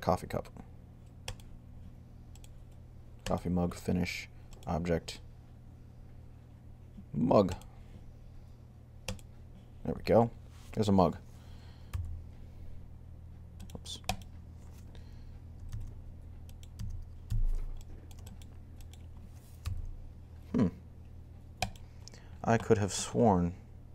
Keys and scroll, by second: 11.7 g, 17.1 z, 19.2-20.0 typing.